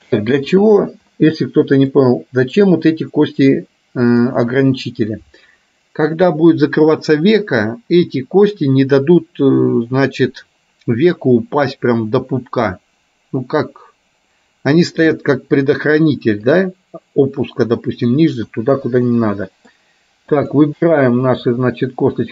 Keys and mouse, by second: 1.3 middle click, 4.0 click, 16.7 click, 19.2 middle click, 20.5 click, 21.4 shift+click, 22.2-22.3 shift+drag.